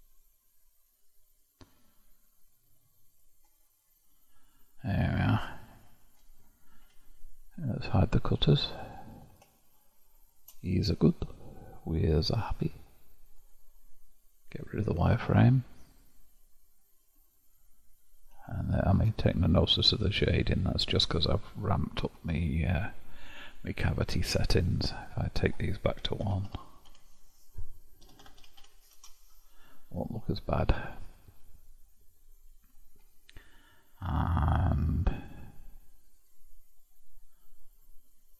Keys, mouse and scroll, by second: 3.5-6.6 middle drag, 8.4 click, 8.9-9.5 scroll down 5, 9.5-10.8 shift+middle drag, 10.8-12.0 scroll up 4, 12.0-13.4 scroll up 1, 13.4-15.2 drag, 15.2-18.3 middle drag, 18.5-22.6 shift+middle drag, 24.3-27.3 drag, 30.1-33.1 middle drag, 36.2 click.